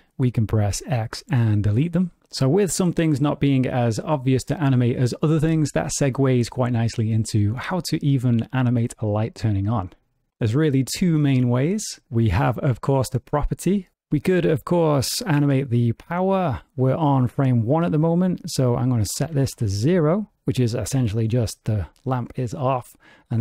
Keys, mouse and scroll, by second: 0.4 x, 18.8 click.